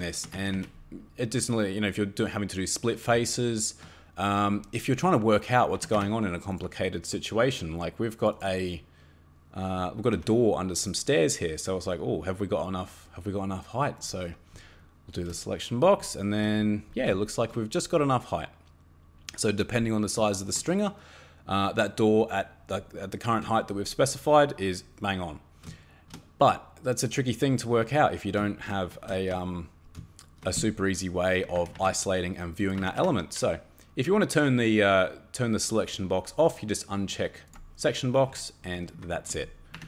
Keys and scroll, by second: 0.3 Escape, 0.5 Escape, 5.8 Escape, 5.9 Escape, 10.1 Escape, 31.5 Escape, 31.7 Escape, 32.8 Escape, 32.9 Escape, 38.8 shift+Caps_Lock, 39.7 Escape.